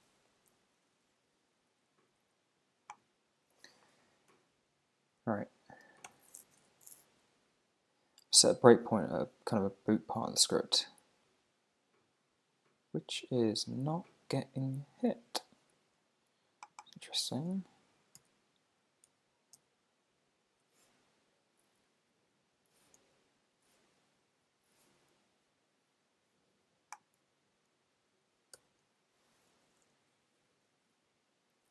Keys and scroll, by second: 4.3 super+`, 6.1 super+r, 18.2 super+c, 19.1 super+e, 19.6 super+f, 23.0 super+g, 28.1 super+`, 28.6 super+r.